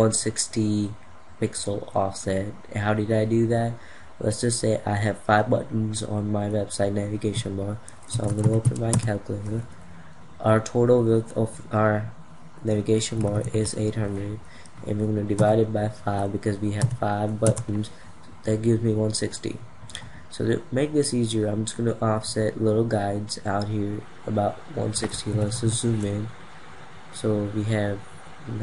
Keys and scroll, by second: 24.9 ctrl+=.